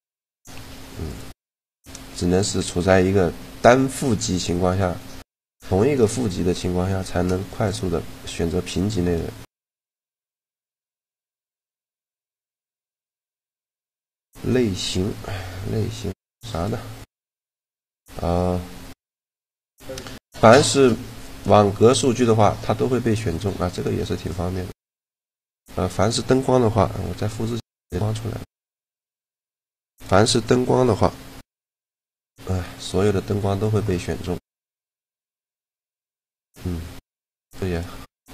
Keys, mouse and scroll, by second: 0.1 g, 4.4-6.3 right drag, 6.3 click, 6.6 shift+g, 7.8 click, 8.5 click, 9.8 click, 10.1-11.8 right drag, 10.3 shift+g, 11.6 click, 12.4 shift+g, 17.7 click, 19.4-21.0 drag, 19.4-21.0 right drag, 20.3 shift+g, 23.7-24.9 middle drag, 24.2 a, 24.9-26.1 right drag, 26.1 click, 26.8 shift+d, 27.7 shift+d, 28.3-30.2 drag, 28.5 shift+d, 31.1 shift+g, 37.0-38.3 right drag.